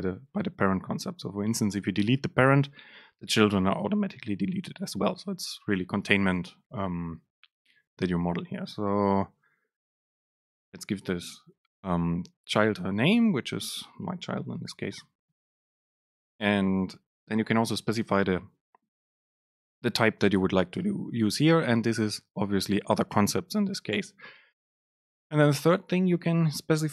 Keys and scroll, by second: 10.2 BackSpace, 15.6 super+space, 24.1 Right, 25.2 Left, 25.6 Right.